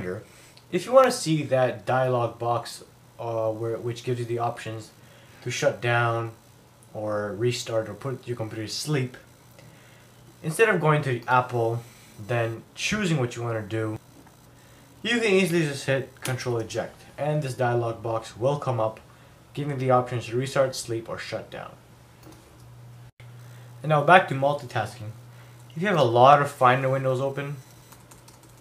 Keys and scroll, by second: 27.9 super+n.